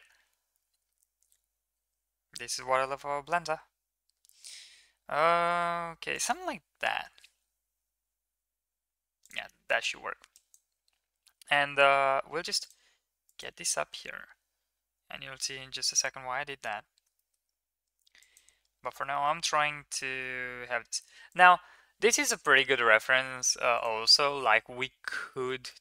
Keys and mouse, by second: 10.1 click, 11.1 g, 13.5 g, 16.4 middle click, 17.0 shift+middle drag, 18.0 middle drag, 19.0 shift+middle click, 20.0 g.